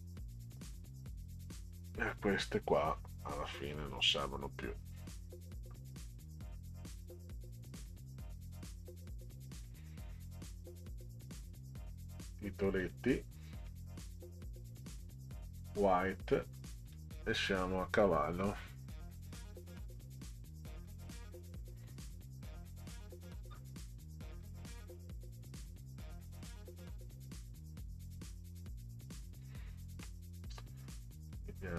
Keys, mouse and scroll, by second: 1.6 click, 2.7-3.9 drag, 4.0 Delete, 5.2 click, 7.8 click, 9.6 click, 11.9 click, 12.8 click, 13.6 click, 14.9 scroll down 2, 16.3 click, 16.9 click, 21.6 scroll up 4, 22.4 scroll up 2, 23.5 scroll down 2, 24.7 click, 24.9 click, 27.8 click, 31.3 click.